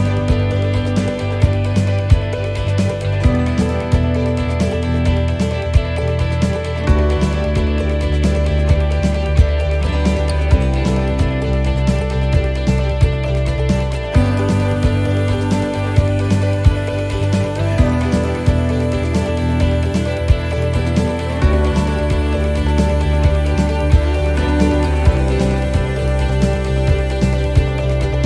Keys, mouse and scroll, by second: 0.2 click, 2.4 shift+d, 3.2 click, 4.0 right click, 4.3 shift+right click, 5.3 e, 8.0 middle click, 8.9 shift+middle click, 9.9 middle click, 11.3 click, 17.1 middle click, 18.8 click, 21.5 middle click, 22.3 shift+middle click, 22.5-22.9 scroll up 4, 22.9 middle click, 23.5 shift+middle click, 25.0 right click, 27.2 e.